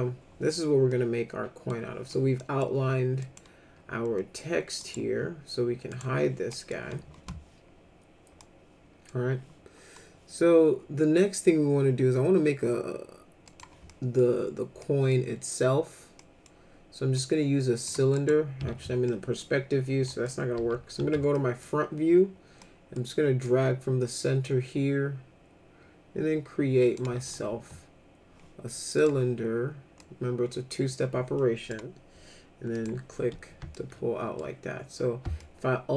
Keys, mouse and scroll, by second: 0.9 middle click, 2.4 middle click, 3.2 click, 4.8 right click, 5.9 click, 6.5 middle click, 8.4 middle click, 13.5 click, 13.9 middle click, 14.8 middle click, 16.2 middle click, 17.1 click, 18.2 right click, 19.0 middle click, 20.1 middle click, 20.5 f, 21.0 z, 21.3 middle click, 22.6 middle click, 23.4-27.0 drag, 27.5 w, 29.0 click, 30.0-31.7 drag, 32.7 click, 33.7 alt+middle click, 35.4-35.9 alt+middle drag.